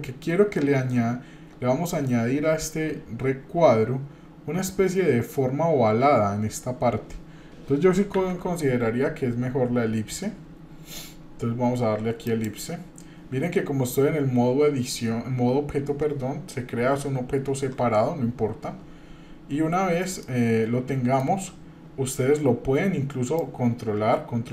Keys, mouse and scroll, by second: 8.2 shift+a, 20.2-21.4 shift+middle drag, 23.4-24.5 drag.